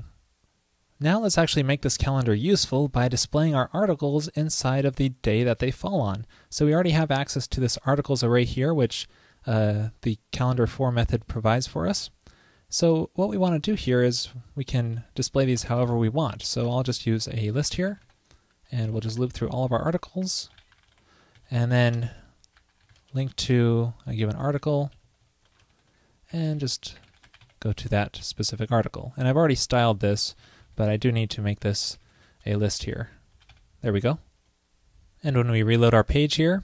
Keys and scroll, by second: 15.6 ctrl+shift+<, 21.6 alt+Left, 21.7 alt+Left, 21.9 alt+Left, 25.1 alt+shift+Right, 25.2 alt+shift+Right, 27.9 super+s, 30.5 super+Right, 31.0 alt+shift+Left, 33.0 ctrl+shift+w, 34.1 super+s, 35.8 super+r.